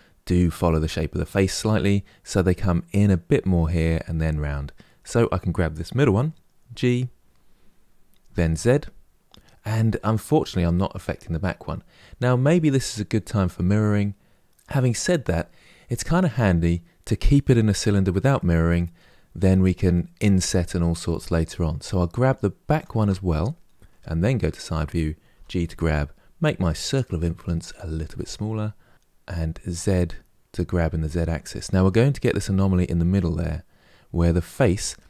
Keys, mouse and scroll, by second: 4.7 click, 6.4 g, 18.1-22.5 middle drag, 22.5 shift+click, 23.9 KP_1, 25.1 g, 31.6-34.7 middle drag.